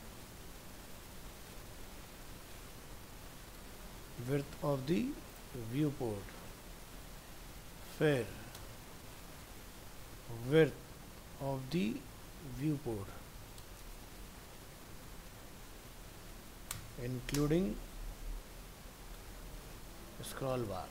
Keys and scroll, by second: 6.7 ctrl+v, 8.6 ctrl+shift+Right.